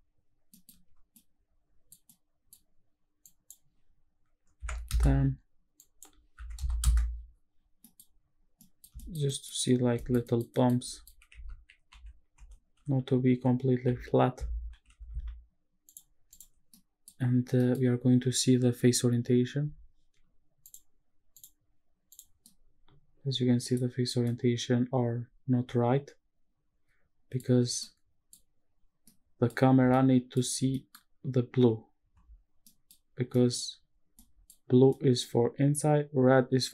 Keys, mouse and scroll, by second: 0.1 scroll down 1, 0.3 scroll down 1, 0.5 middle click, 0.7 scroll up 1, 1.1-1.9 middle drag, 2.1 middle click, 3.2-4.9 drag, 5.8-6.8 drag, 7.6 scroll down 1, 7.8 middle drag, 8.1-8.6 scroll up 1, 8.6 middle drag, 9.0 shift+middle drag, 9.3 middle drag, 10.0 shift+middle click, 10.2 middle click, 10.5 middle drag, 10.8 shift+middle drag, 11.5 shift+`, 16.3 click, 16.6 scroll down 1, 16.7-17.1 middle drag, 17.4 scroll down 2, 17.6 middle drag, 18.0-20.6 scroll up 2, 20.6-21.8 drag, 22.1 click, 22.4-23.7 middle drag, 23.9 scroll up 1, 24.2-27.3 middle drag, 27.5 scroll up 2, 27.8-28.3 middle drag, 28.7 scroll down 1, 29.1-29.5 middle drag, 29.6 scroll down 1, 29.9-30.3 middle drag, 30.6 scroll down 2, 30.7 middle drag, 32.6 middle drag, 33.1-34.1 scroll up 5, 33.3 middle drag, 34.1-34.5 middle drag, 34.7 scroll up 1, 34.9 middle drag.